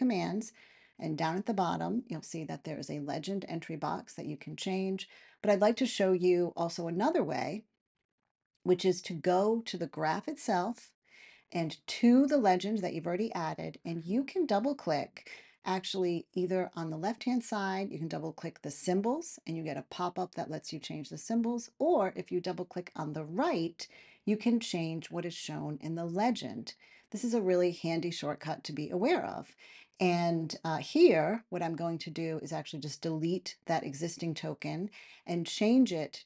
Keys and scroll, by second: 32.9 BackSpace.